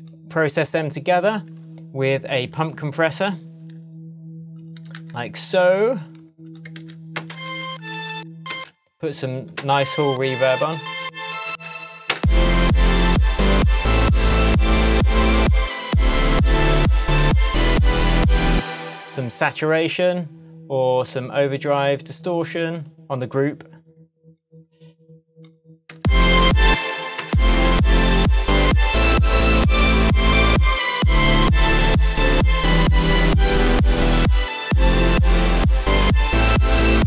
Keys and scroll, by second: 5.0 super+c, 6.8 super+v, 7.2 super+space, 8.0 space, 8.5 space, 11.5 space, 18.5 space, 25.9 space.